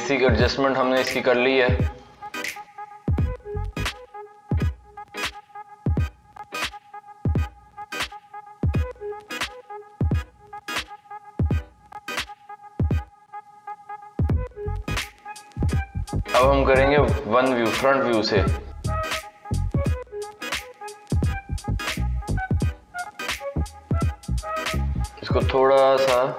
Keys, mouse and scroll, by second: 1.0-1.5 scroll up 1, 1.5-3.6 shift+middle drag, 3.6 click, 4.4 click, 5.7 g, 8.5 click, 9.0 g, 14.4-14.9 scroll down 2, 14.9-16.8 shift+middle drag, 16.8 KP_1, 18.1 KP_3, 19.4-21.1 middle drag, 21.1 KP_1, 22.1-23.6 middle drag, 23.6-24.0 scroll up 1, 24.0 middle click, 24.8-25.5 scroll down 1, 25.7 click, 26.2-26.3 middle drag.